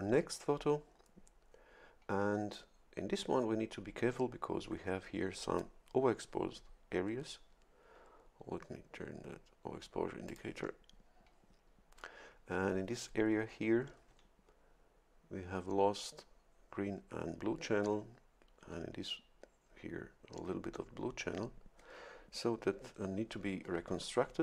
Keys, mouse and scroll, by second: 10.3 click, 23.6 shift+F11.